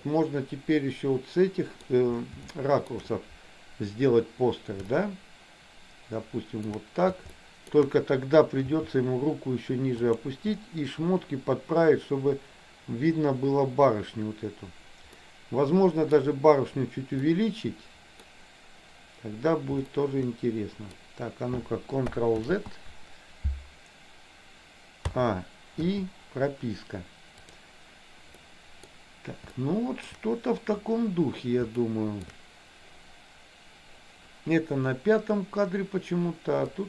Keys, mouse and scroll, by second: 2.7 shift+middle click, 5.0-6.8 shift+middle drag, 7.4 shift+middle click, 8.8 g, 15.3 scroll up 1, 15.4 middle click, 16.2 scroll down 1, 17.4 scroll up 1, 17.5 middle click, 20.0-21.1 shift+middle drag, 22.6 ctrl+z, 25.2 a, 26.0 i, 27.4 click, 28.6 middle click, 29.6 shift+middle click, 31.9 shift+middle click.